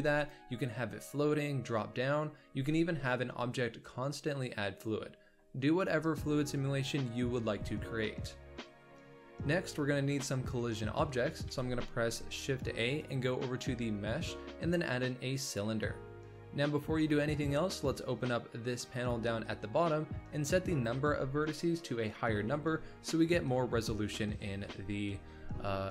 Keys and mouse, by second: 8.4-9.0 middle drag, 11.4 shift+a, 18.9 click, 20.7-24.6 drag.